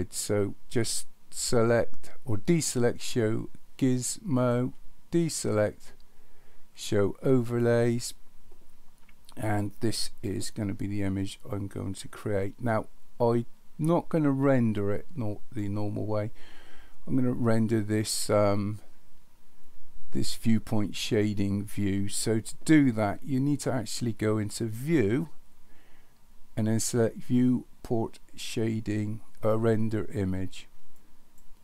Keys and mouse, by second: 4.4 click, 7.4 click, 24.7-31.4 drag.